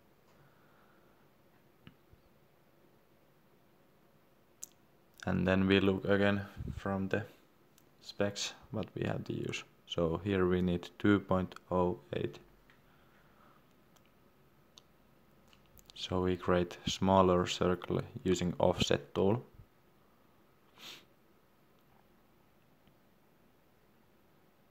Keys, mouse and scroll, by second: 0.4 Return, 1.7 Escape, 5.4 click, 15.4 middle click, 16.6 click.